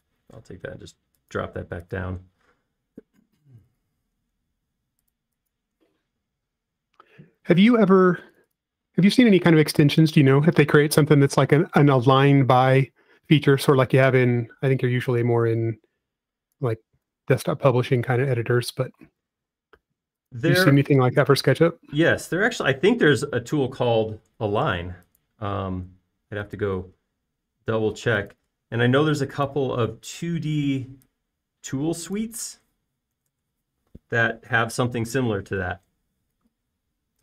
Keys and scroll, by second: 1.6 m, 3.4 space, 9.1 f, 10.5 space, 14.3 typing, 15.4 f, 17.9 typing, 18.1 Return, 19.1 space, 20.4 typing, 22.7 space, 31.6 f, 34.2 1, 34.4 Return.